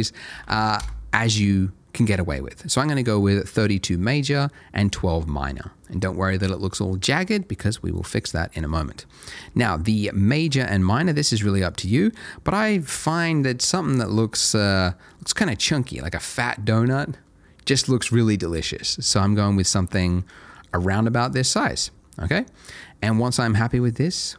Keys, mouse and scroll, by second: 0.3 1, 0.4 2, 0.8 Return, 10.5 middle click, 11.4 click, 14.4 middle click, 18.6 middle click.